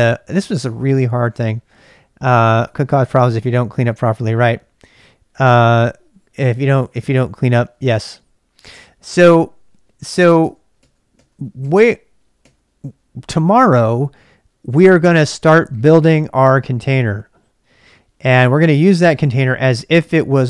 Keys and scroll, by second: 0.0-1.3 typing, 9.2-12.3 typing.